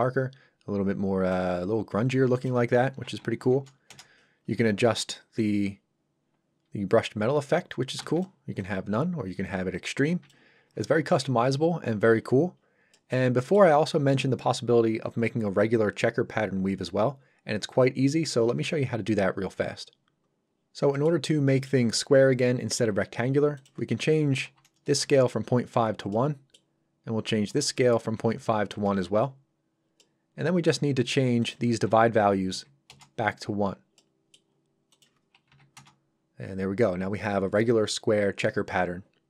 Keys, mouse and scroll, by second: 2.4 click, 3.2 KP_8, 3.9 Return, 5.4 click, 8.0 Escape, 12.3 scroll down 1, 13.0 middle click, 20.6-20.9 scroll up 1, 21.0 middle click, 21.3 scroll up 1, 21.6 middle click, 23.6 click, 24.5 KP_1, 24.9 Return, 26.1 middle click, 27.5 click, 28.4 KP_1, 28.8 Return, 30.0 middle click, 31.4 click, 32.6 KP_1, 32.9 Return, 34.0 middle click, 35.0 click, 35.5 KP_1, 35.8 Return.